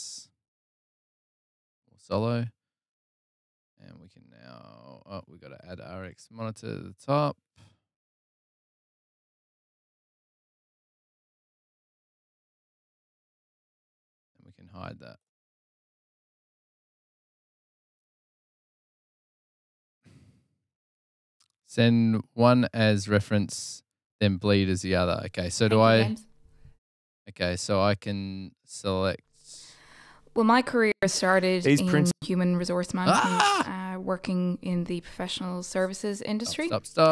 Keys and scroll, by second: 32.7 super+Tab, 32.7 space.